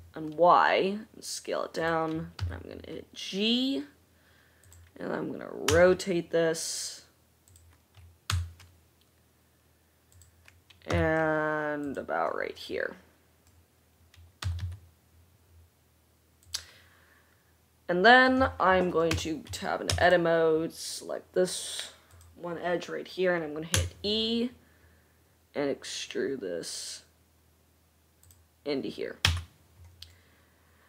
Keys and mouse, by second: 2.8 g, 6.0 r, 8.7 g, 11.3 g, 14.7 g, 19.6 Tab, 20.4 2, 22.4 drag, 24.3 e, 29.6 Tab.